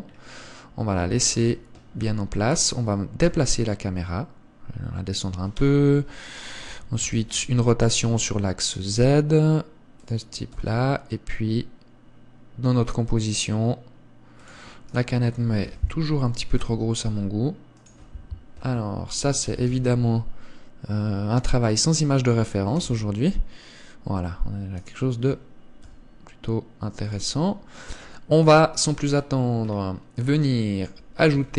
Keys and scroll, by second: 1.7 KP_0, 3.6 g, 6.0 g, 7.4 r, 10.9 g, 16.0 KP_1, 17.0 s, 19.8 g, 23.2 KP_0, 26.2 g, 28.8 KP_3.